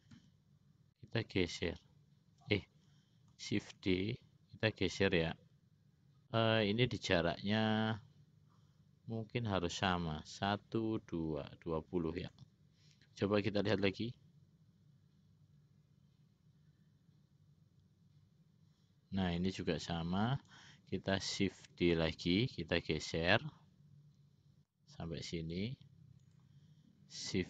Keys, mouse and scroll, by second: 0.3 d, 3.9 shift+d, 13.8 click, 19.7-20.7 drag, 22.1 shift+d.